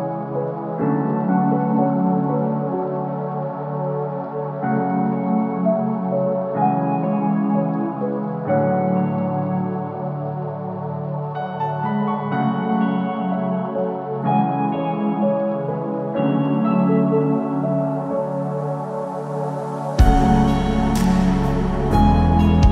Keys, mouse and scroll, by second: 0.8 e, 3.9 x, 5.6 shift+middle click, 6.2 Tab, 7.2 click, 8.7-9.3 scroll down 5, 9.1-10.0 scroll up 4, 9.4 click, 10.0 click, 10.2 Tab, 10.6 middle click, 11.1 shift+middle click, 11.8 middle click, 12.0 scroll up 2, 12.7 ctrl+r, 15.5 Tab, 15.7 scroll down 4, 16.0 click, 16.3 middle click, 16.6 shift+middle click, 16.8-17.6 shift+scroll up 4, 17.5 click, 17.8 Tab, 18.2 scroll down 1, 18.5 scroll up 1, 18.5 KP_3, 19.1 shift+middle click, 19.4-19.8 scroll up 2, 20.0 click, 20.3 shift+middle click, 20.5-20.9 scroll up 3, 20.9 click, 21.4 g.